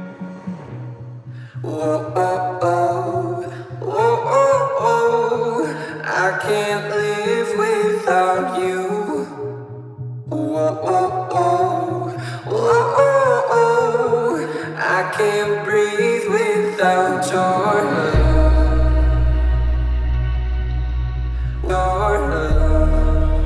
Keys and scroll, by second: 5.0 space, 5.4 Escape, 7.3 h, 12.6 t, 14.6 space, 17.3 m.